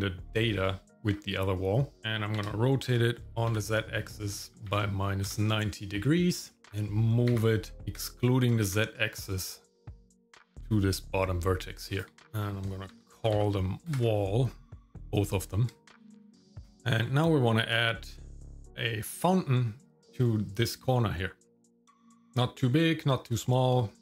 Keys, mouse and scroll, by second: 2.4 r, 6.6 middle click, 7.3 g, 12.2-13.9 ctrl+drag, 13.3 l, 15.0 click, 15.2-16.6 drag, 16.4 l, 16.8 shift+middle click, 16.9-17.8 scroll up 1, 17.8 middle click.